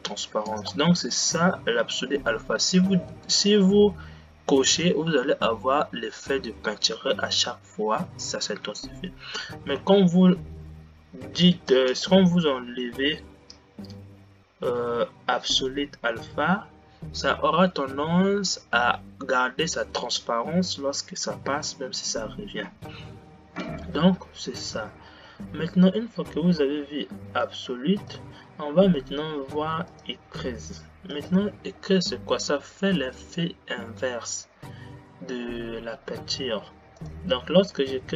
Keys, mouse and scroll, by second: 1.1 space, 30.2 click, 31.4-37.3 drag.